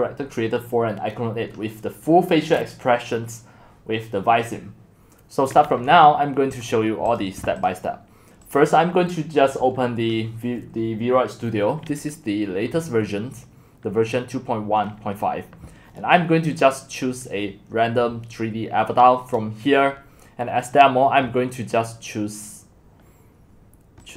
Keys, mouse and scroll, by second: 6.7-13.7 drag, 13.4 scroll down 1, 15.3-15.9 scroll down 1, 15.9-17.4 scroll down 1, 17.4-18.5 scroll down 1, 24.1 click.